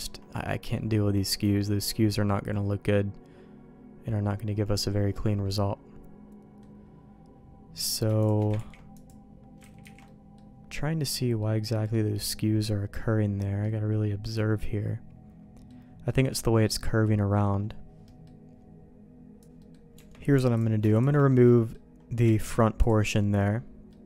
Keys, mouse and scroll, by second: 0.4 middle click, 1.6 middle click, 2.1-6.6 middle drag, 7.8 click, 8.2 shift+click, 8.5 ctrl+e, 9.8 ctrl+z, 10.0 middle click, 11.4 middle click, 12.5 middle click, 13.7-15.6 middle drag, 16.0-17.4 middle drag, 18.0 middle click, 19.4 ctrl+z, 19.4 alt+a, 19.6 middle click, 19.9 Tab, 20.9 alt+shift+click, 21.2 middle click, 22.4 ctrl+e, 23.1 middle click.